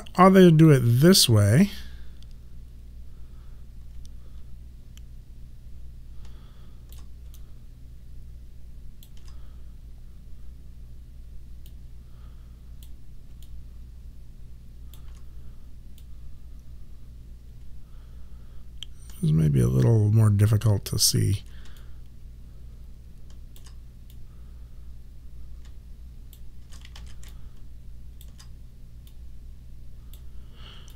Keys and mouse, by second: 1.8 click, 4.0 alt+click, 7.4 alt+click, 11.8 click, 13.5 alt+click, 16.1 click, 21.9 alt+click, 24.2 click, 27.1 ctrl+z, 27.4 alt+click.